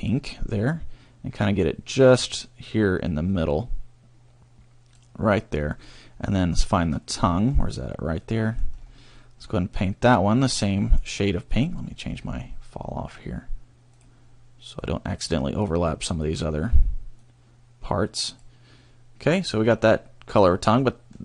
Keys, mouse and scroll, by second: 1.5 click, 5.5 scroll down 1, 6.2 middle click, 7.7 scroll up 2, 8.2 middle click, 8.7-9.1 scroll up 2, 9.1 middle click, 9.9 click, 12.1 scroll down 1, 13.9 click, 14.8 click, 17.2 click, 19.7 middle click, 20.8 middle click.